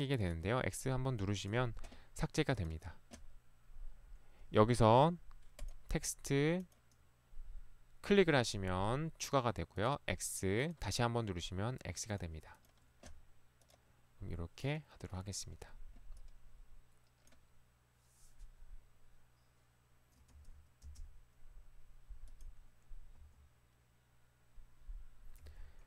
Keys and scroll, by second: 20.4 Escape, 20.9 space, 23.2 Escape, 25.5 Escape.